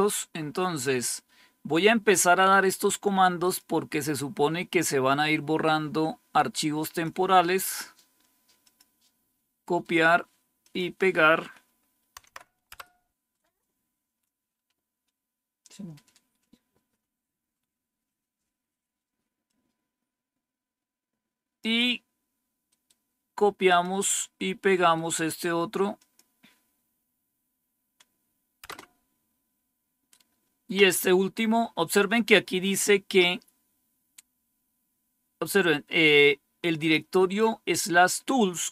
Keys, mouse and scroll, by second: 3.3 click, 4.1-7.0 drag, 7.7 right click, 8.5-9.5 drag, 9.5 right click, 10.5 click, 12.1 Tab, 12.3 Right, 12.6 Return, 19.4-21.5 drag, 22.6 right click, 23.6 click, 24.7 right click, 25.9-26.9 drag, 28.5 Return, 38.3-38.7 drag.